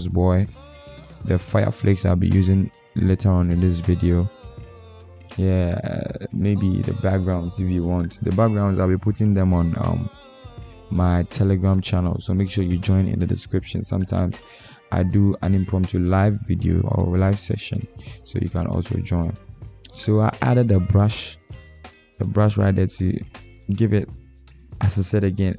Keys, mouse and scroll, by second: 8.4 alt+click, 23.3 ctrl+click.